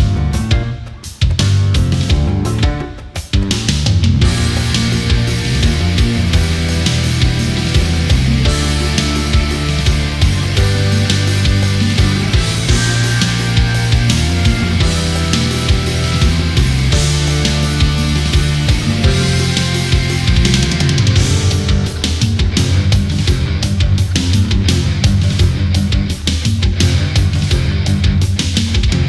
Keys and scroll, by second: 10.3 ctrl+z, 16.1 ctrl+z, 18.9 ctrl+a, 26.6 ctrl+z, 28.2 ctrl+z.